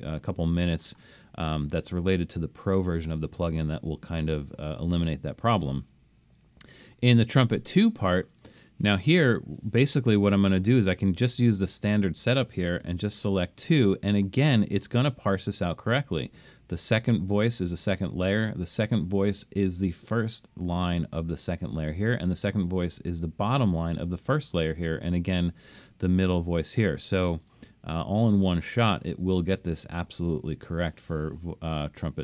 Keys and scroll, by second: 12.9 2.